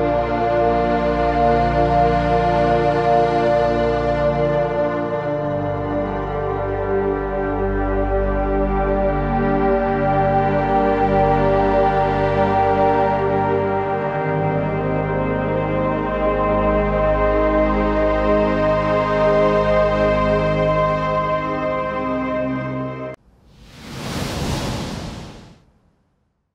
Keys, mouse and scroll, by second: 3.6 shift+Up, 6.0 click, 9.2-10.8 alt+drag, 10.8-12.5 alt+drag, 14.2-15.4 typing, 14.6 click, 15.2 click, 15.6 click, 22.4 ctrl+z, 22.6 scroll up 1, 22.8 scroll down 1, 23.0 z.